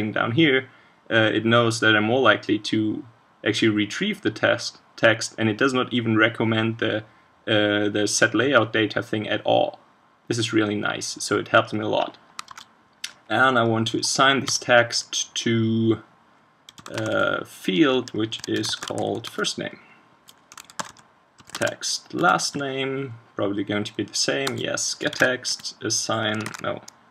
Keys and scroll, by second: 12.5 super+1, 21.6 ctrl+space, 25.1 super+1, 26.5 super+z.